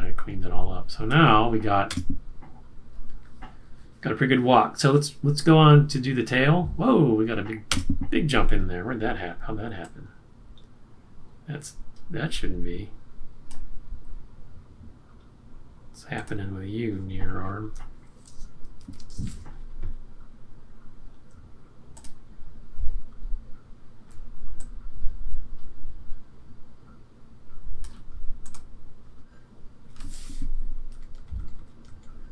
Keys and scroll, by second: 1.8 Return, 7.6 Return, 20.3 super+=, 31.3-32.3 typing.